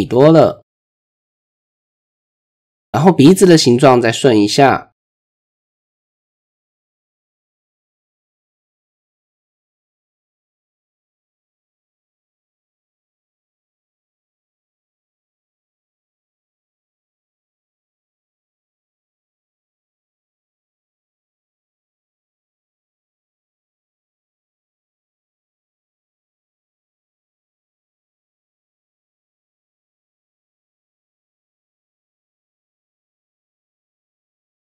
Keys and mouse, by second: 1.1 middle click, 2.0 shift+middle click, 2.4 middle click, 3.2 shift+middle click, 3.6 middle click, 4.4 click, 6.5 e, 8.7 a, 9.5 m, 11.4 shift+middle click, 14.1-14.8 shift+drag, 14.8 middle click, 15.8 click, 17.0 shift+click, 18.0 g, 20.2-20.7 middle drag, 21.5 middle click, 22.6 g, 26.6 ctrl+KP_3, 27.6 shift+click, 28.9 click, 29.1 middle click, 30.5 click, 30.7 middle click, 31.2 ctrl+KP_3, 32.5 g.